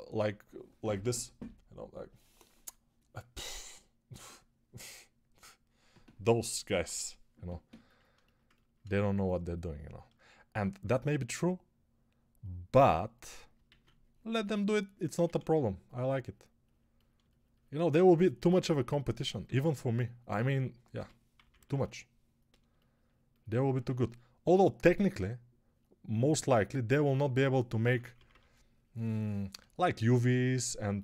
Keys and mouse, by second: 13.5 alt+q, 15.1 1, 20.8 g, 21.3 ], 21.4 ], 21.6 ], 23.7 1, 27.7 p, 28.0 [, 28.1 [.